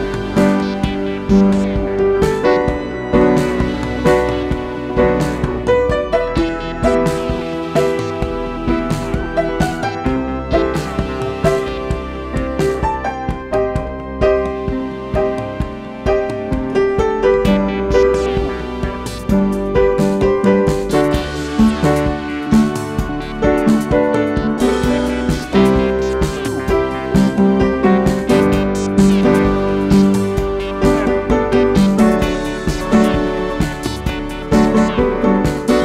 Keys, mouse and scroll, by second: 25.5-35.8 drag.